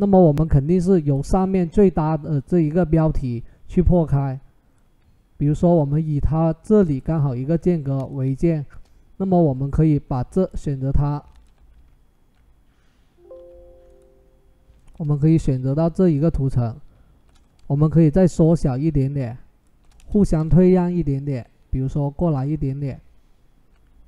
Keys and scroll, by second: 9.2 ctrl+t, 13.1 v, 15.3 ctrl+t, 19.8 Return.